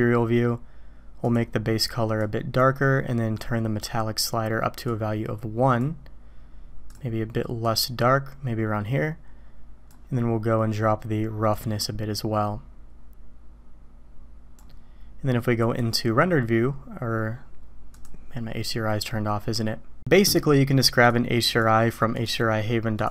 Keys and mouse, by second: 4.9 click, 6.9 drag, 11.6-14.6 drag, 15.7 click, 17.9 click, 21.1-23.1 drag.